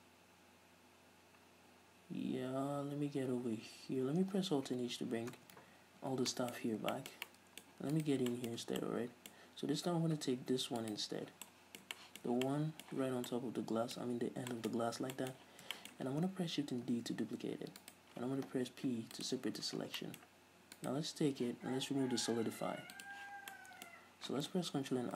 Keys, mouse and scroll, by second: 1.4-1.8 scroll up 2, 4.3-4.9 scroll down 2, 4.9 alt+h, 5.3 scroll down 2, 5.5 Tab, 6.2 alt+r, 6.5 middle click, 6.8 scroll up 1, 7.5-8.1 middle drag, 8.1 right click, 8.6-9.9 middle drag, 8.8 Tab, 10.1 z, 11.0 alt+right click, 11.5 scroll down 1, 11.7-13.2 middle drag, 13.2 z, 13.5-15.0 middle drag, 15.0 scroll up 2, 15.4 middle click, 16.3-18.1 middle drag, 16.3 scroll down 2, 17.1 shift+d, 18.1 right click, 19.1 p, 19.9 Tab, 20.2-21.1 middle drag, 21.1 right click, 23.2 click, 23.6 scroll down 2, 23.7 middle click.